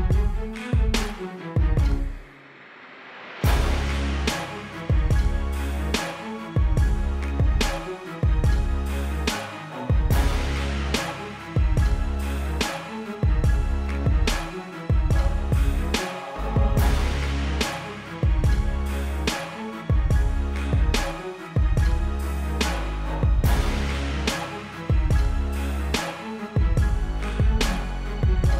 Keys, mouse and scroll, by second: 1.7 KP_1, 1.9 KP_0, 3.0 click, 3.5 z, 3.8 click, 5.3 v, 5.5 click, 6.6 Down, 6.8 Up, 7.1 click, 7.2 space, 7.3 click, 8.6 -, 8.7 space, 8.8 click, 9.3 click, 10.5 click, 10.6 space, 10.8 click, 11.0 b, 11.2 click, 15.0 v, 15.2 click, 16.2 Down, 16.4 click, 16.5 =, 16.6 click, 16.9 Left, 17.8 click, 18.2 space, 18.4 click, 20.5 z, 20.7 click, 21.6-28.4 typing, 21.7 click, 21.8 Right, 22.4 click, 22.9 click, 23.9 click, 25.1 click, 26.5 click, 26.8 click, 27.2 click, 28.1 click.